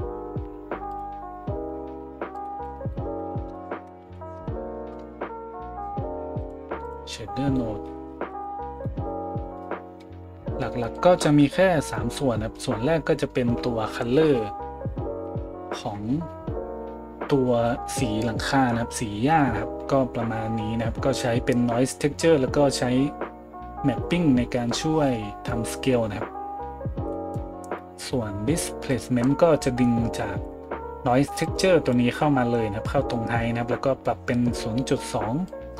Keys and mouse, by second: 1.0-2.3 middle drag, 2.3-35.7 drag, 4.0 a.